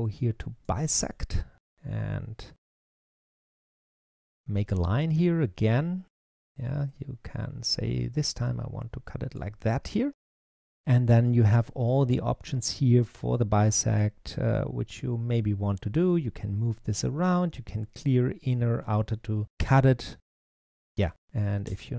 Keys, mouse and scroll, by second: 2.5-3.8 middle drag, 3.8 click, 13.2 click, 14.7 click, 21.5 Return.